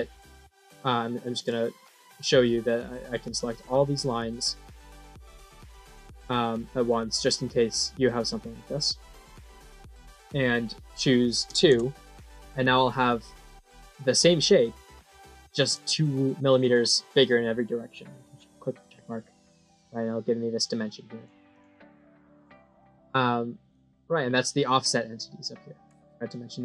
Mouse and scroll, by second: 0.7 click, 1.7 middle click, 3.1 click, 4.2 click, 5.1 click, 5.9 click, 6.6 click, 7.9 click, 12.3-15.5 middle drag, 18.1 click, 19.0 middle click, 19.9-21.1 drag, 21.4 click, 22.7 middle click.